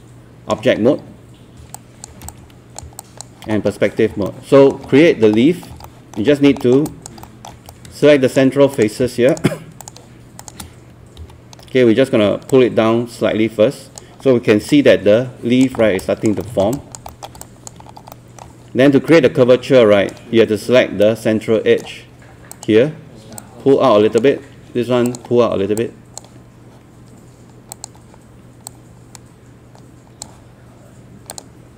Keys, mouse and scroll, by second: 1.8 alt+click, 3.0 alt+click, 3.7-4.0 scroll up 1, 4.3 alt+middle click, 4.9 scroll down 1, 5.5 scroll up 1, 5.9 alt+middle click, 6.3 scroll up 1, 6.6 alt+middle click, 6.9 alt+click, 7.2 alt+middle click, 7.7 right click, 8.8 click, 9.3 shift+click, 9.8 shift+click, 10.4 shift+click, 11.2 shift+w, 12.5 click, 14.5 scroll down 1, 14.7 alt+click, 15.8 scroll up 1, 16.0 alt+click, 16.7 alt+click, 17.1 alt+middle click, 17.5 alt+click, 17.9 alt+scroll up 1, 18.1 alt+middle click, 19.1-22.3 right drag, 22.5-31.7 drag.